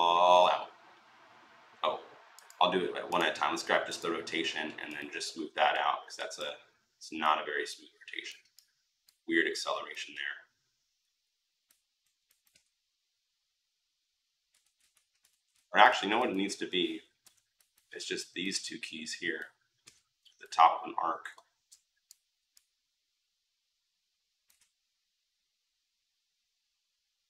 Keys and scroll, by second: 14.4 ctrl+x, 15.1 ctrl+z, 17.0 Delete.